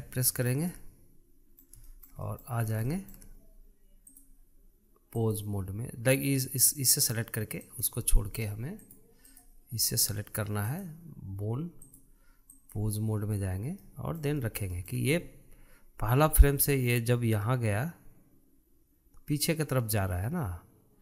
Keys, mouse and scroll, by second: 0.8 Tab, 1.1-1.6 scroll down 2, 1.6-3.5 middle drag, 3.5 scroll up 1, 3.7-5.0 shift+middle drag, 5.0-8.0 drag, 8.5 click, 9.7-11.7 drag, 12.7-14.7 drag, 14.7-17.6 middle drag, 17.6 click.